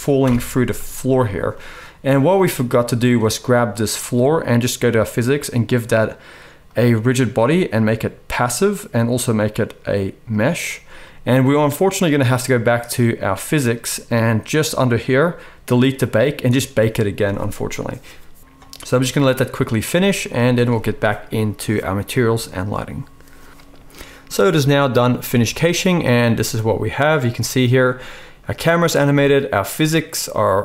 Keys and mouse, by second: 0.2 shift+Left, 1.0-2.2 middle drag, 1.0-2.2 right drag, 3.3-6.6 drag, 13.6-15.7 drag, 17.1-28.2 drag, 20.6-28.2 middle drag, 20.6-28.2 right drag, 25.2 space.